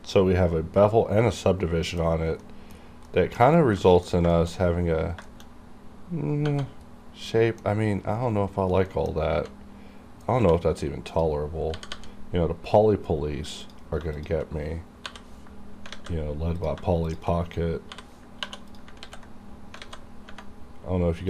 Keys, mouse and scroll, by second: 0.0-2.1 middle drag, 2.1-2.5 scroll up 1, 2.5 middle click, 2.9 scroll up 1, 3.1 middle click, 3.5 scroll down 1, 3.8 middle click, 4.2-4.9 scroll up 3, 4.3 shift+middle click, 5.3 shift+middle click, 5.4 shift+scroll up 1, 6.7-7.3 scroll down 1, 7.3 middle click, 8.6-8.9 scroll down 1, 8.9 middle click, 9.1-10.3 scroll up 2, 10.4 1, 11.1 click, 12.0 g, 13.7 click, 14.2 shift+click, 15.0 j, 15.9 alt+a, 16.6 click, 17.0 shift+click, 17.9 j, 18.4 j, 18.7 click, 19.0 ctrl+x, 19.8 alt+a.